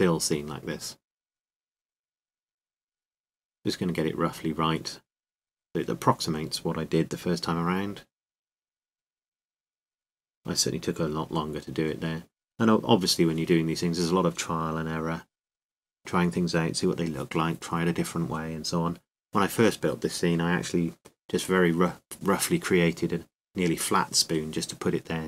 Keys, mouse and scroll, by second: 1.3 middle click, 2.8 right click, 3.7 click, 8.4 r, 11.4-14.1 drag, 15.4 r, 16.4-18.3 drag, 17.8-18.9 middle drag, 17.8 r, 18.6-20.7 drag, 19.8 s, 20.8-23.2 drag, 22.6 r, 24.1-25.2 drag.